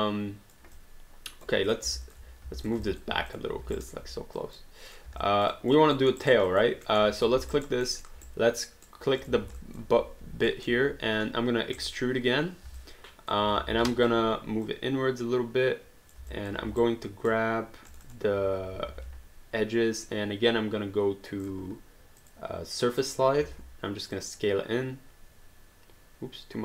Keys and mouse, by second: 0.7 alt+click, 1.7 click, 2.1 alt+click, 2.6 click, 2.9 alt+click, 3.3 click, 3.8 alt+right click, 4.4 click, 5.2 alt+click, 6.0 alt+middle click, 6.2 alt+right click, 6.5 alt+click, 6.9 alt+middle click, 7.2 click, 7.5 alt+right click, 7.9 alt+middle click, 8.2 right click, 9.2 click, 9.6 alt+click, 10.5 alt+middle click, 11.8 click, 13.6 alt+click, 13.9 alt+click, 16.3 alt+click, 16.6 q, 16.8 right click, 17.9 click, 18.9 r, 21.4 click, 23.4 r, 24.1 click.